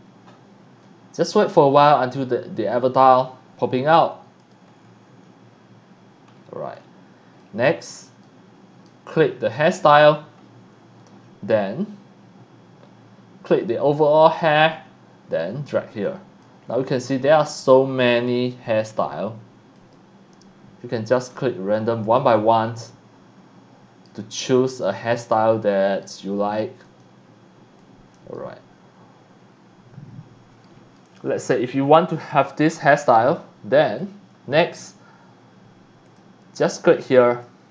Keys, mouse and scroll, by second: 1.6-2.0 scroll up 2, 4.4 click, 4.7 scroll down 1, 5.0 scroll up 1, 6.8 scroll up 1, 7.4-8.0 middle drag, 8.2-8.8 right drag, 9.5 click, 10.4 middle click, 10.4 scroll up 1, 13.9 click, 15.4 click, 16.6-17.3 scroll down 2, 18.1-18.7 scroll up 1, 19.8 click, 21.7-22.1 drag, 22.3-24.1 right drag, 24.5-25.1 middle drag, 25.3 right click, 26.8 click, 27.8-28.2 drag, 28.3-30.6 middle drag, 31.0-31.4 middle drag, 33.6-34.0 scroll up 1, 34.0-34.7 drag, 36.1 click, 37.2 click.